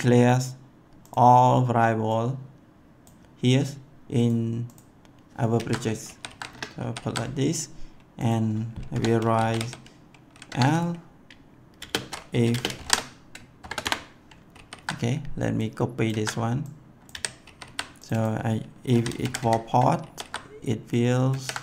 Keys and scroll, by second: 5.5 ctrl+v, 6.0 ctrl+s, 6.4 Return, 6.7 ctrl+s, 8.9-10.3 typing, 10.4 Tab, 11.8-13.6 typing, 13.8 Return, 14.5 ctrl+s, 16.1 ctrl+c, 17.1 ctrl+v, 17.4 ctrl+s, 18.6-19.8 typing, 20.0 ctrl+s, 21.3 ctrl+c.